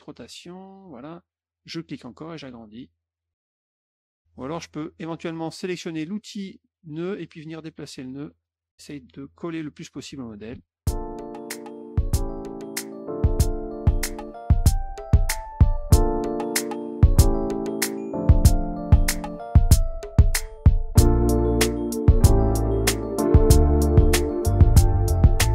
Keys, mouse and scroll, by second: 1.6 click, 3.2 click, 3.7 click, 5.9 click, 7.2-8.4 drag, 8.7 click, 9.5 middle click, 10.4 F1, 11.2 click, 11.5 click, 11.8 click, 12.7 click, 13.0 click, 13.2 click, 13.5 click, 13.7 middle click, 14.3 click, 15.0 click, 15.7 click, 16.1 click, 16.4 click, 16.8 middle click, 17.0 middle click, 17.4 click, 17.8 click, 18.1 click, 18.6 click, 19.3 click, 19.4 click, 20.3 click, 20.8 click, 21.3 click, 21.6 click, 21.9 middle click, 22.3 click, 23.1 click, 23.7 click, 24.5 click, 24.8 middle click, 25.1 click.